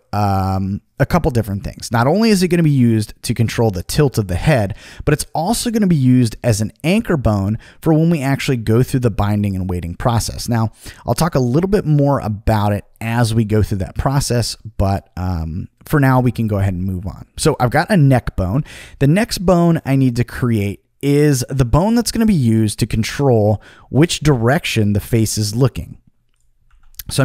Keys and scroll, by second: 26.6 b.